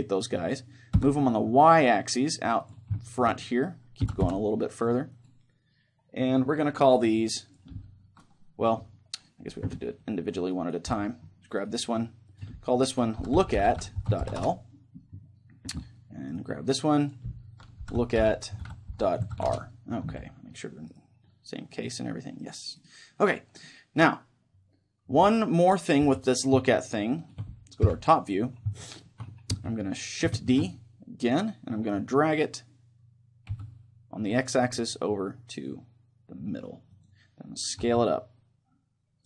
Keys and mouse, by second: 2.7-4.6 drag, 3.0-5.2 middle drag, 4.0 g, 5.2-7.2 drag, 7.4-10.5 drag, 10.9-14.4 middle drag, 11.6-14.4 right drag, 12.3-14.4 drag, 16.3-19.5 right drag, 17.0-19.5 drag, 20.9-26.0 right drag, 26.0 KP_3, 26.9-32.2 middle drag, 27.8 KP_7, 30.5 shift+d, 37.0-38.9 drag, 37.8 s.